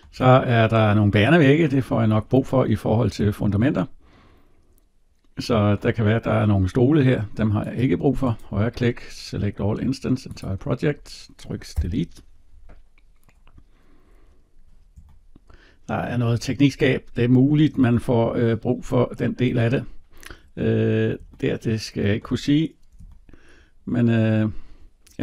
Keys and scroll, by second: 11.6 Delete.